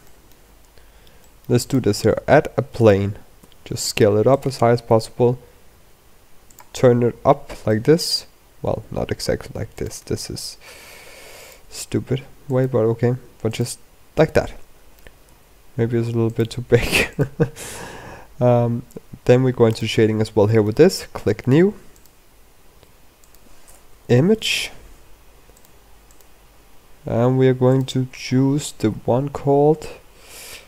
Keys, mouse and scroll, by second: 0.2-0.9 scroll down 8, 1.1 middle click, 1.5 click, 1.8 shift+a, 3.3 s, 4.8 r, 6.6-7.2 scroll down 9, 7.3 scroll up 2, 7.6 middle click, 8.1-8.5 scroll down 2, 8.6 r, 9.8 r, 11.4 r, 12.7 g, 13.7 scroll up 3, 14.0 middle click, 15.2 s, 16.3 g, 17.3-17.7 scroll up 5.